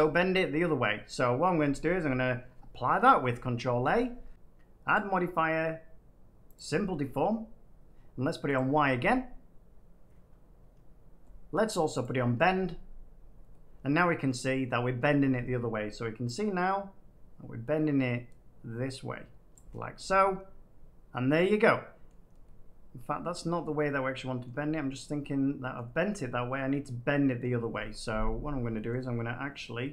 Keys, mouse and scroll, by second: 0.7 middle click, 3.1 middle click, 3.6 ctrl+a, 4.3 click, 4.9 click, 6.5 click, 8.5 click, 12.0 click, 14.2 middle click, 19.5 click, 22.0 middle click, 24.4 middle click, 25.7 middle click, 26.5 middle click, 27.4 middle click, 28.0 middle click, 28.9 middle click.